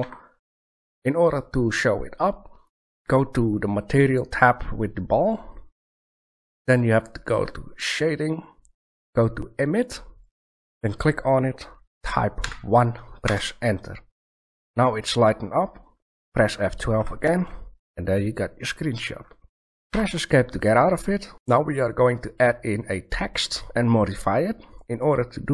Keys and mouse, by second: 0.0 Escape, 5.2-7.2 middle drag, 10.2-11.9 middle drag, 19.9 Escape.